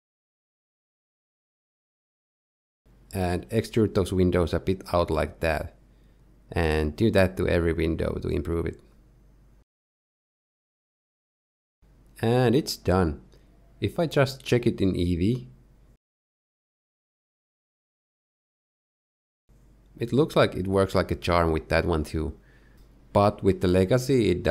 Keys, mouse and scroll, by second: 1.0-1.5 scroll up 3, 1.7 shift+middle click, 3.3 e, 6.8 middle click, 9.2 z, 9.3 middle click, 9.5 middle click, 9.7 middle click, 9.7 shift+middle click, 9.9 shift+middle click, 10.0 shift+middle click, 11.8-12.1 scroll down 4, 12.1 middle click.